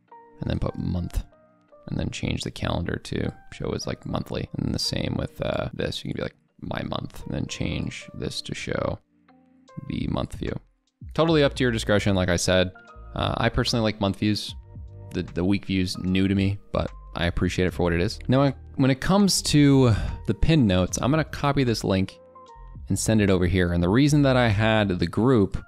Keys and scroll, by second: 7.2 ctrl+BackSpace, 23.0 ctrl+v.